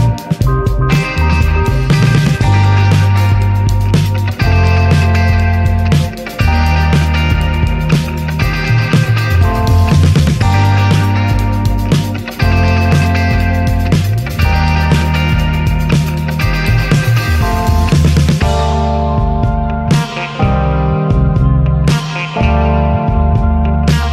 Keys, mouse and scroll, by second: 0.8 scroll down 4, 1.0-2.4 middle drag, 2.4-5.7 drag, 6.7-7.3 shift+middle drag, 7.3 scroll up 1, 8.1-9.4 drag, 9.5 ctrl+z, 10.1 r, 11.9-12.7 drag, 13.0 alt+middle click, 13.3 shift+middle click, 13.5 r, 15.3-16.2 drag, 17.1 s, 18.1 click, 19.5 middle click, 20.0 ctrl+s, 20.9-21.9 drag, 21.9 ctrl+s, 22.7-23.3 scroll down 3, 23.8-24.1 drag.